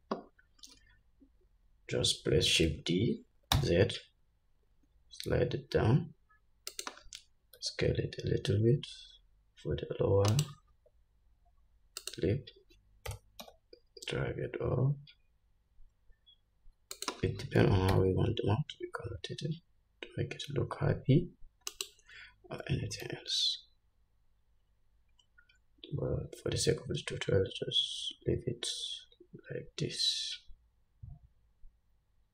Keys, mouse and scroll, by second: 2.8 shift+d, 12.3 s, 13.4 g, 17.9 r, 23.0 g.